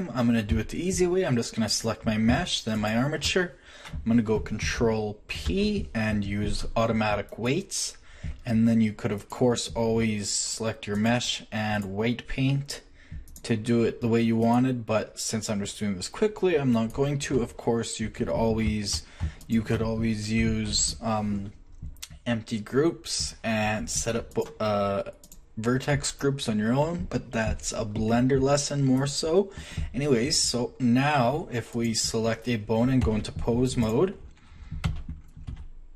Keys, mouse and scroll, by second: 0.5 z, 5.4 ctrl+shift+p, 9.2-10.5 drag, 14.4 click, 14.8 click, 16.3 click, 20.7 ctrl+shift+p, 24.3-25.2 drag, 27.8-28.9 middle drag, 31.7 click, 33.0 ctrl+Tab, 34.8 z, 35.5 r.